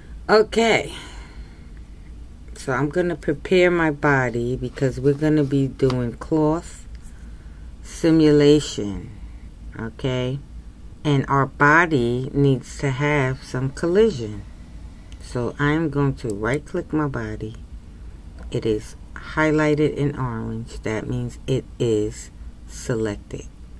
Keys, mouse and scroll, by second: 16.5 right click.